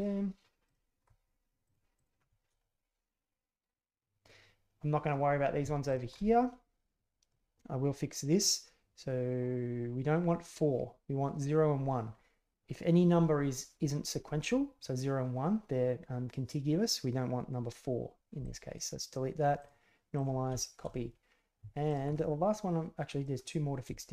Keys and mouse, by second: 0.6 alt+click, 1.6 click, 1.9 click, 2.6-4.0 middle drag, 5.8 alt+right click, 6.1-7.3 middle drag, 18.4 click, 19.6-20.2 drag, 20.6 shift+middle click, 20.9 middle click, 21.9 alt+click, 22.1-23.2 middle drag.